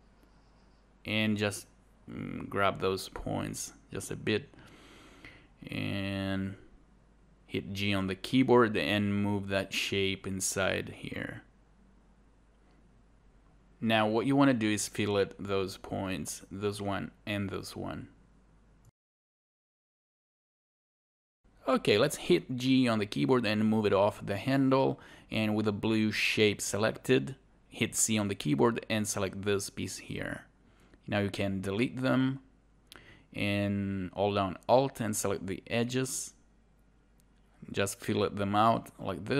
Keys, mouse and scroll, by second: 20.9 click, 28.2 scroll down 1, 30.4 alt+click.